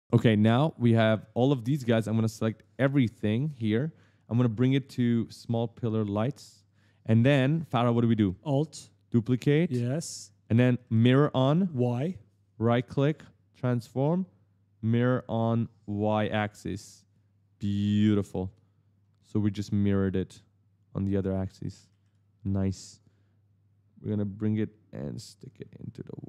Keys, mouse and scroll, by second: 2.3 shift+click, 5.1 click, 6.9 right click, 7.0 right click, 7.3 right click, 9.2 alt+click, 10.6 right click, 10.6 right click, 10.8 right click, 11.8 right click, 16.0 click, 16.4-18.3 typing, 16.5 right click, 17.4 right click, 19.3 click, 21.0 right click, 21.1 right click, 21.2 right click, 21.2 right click, 21.3 right click, 21.6 right click, 21.7 right click, 21.7 right click, 21.8 right click, 22.8 click.